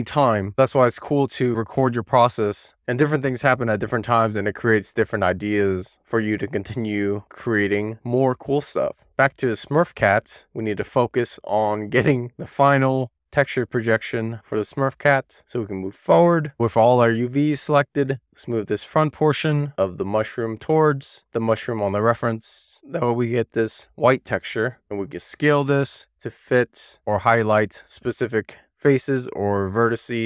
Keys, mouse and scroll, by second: 0.2 middle click, 0.7 middle click, 1.4 middle click, 2.2-8.6 middle drag, 8.7-10.2 scroll down 1, 10.2-12.1 middle drag, 14.4-15.9 scroll up 1, 15.9-16.9 scroll up 1, 16.9 drag, 18.0-19.1 drag, 22.5 e, 22.8 r, 23.6 click, 25.9 w, 29.9 click.